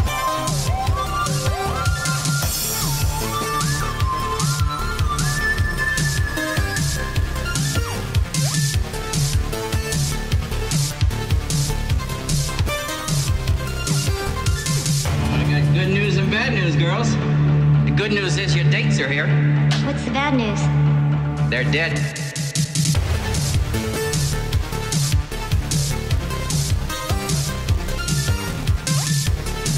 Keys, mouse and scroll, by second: 1.2 scroll down 1, 1.7-3.5 scroll up 1, 4.2 click, 18.9-19.5 typing, 19.3 click, 21.2 click, 24.8 right click, 25.5 click, 28.9 Return.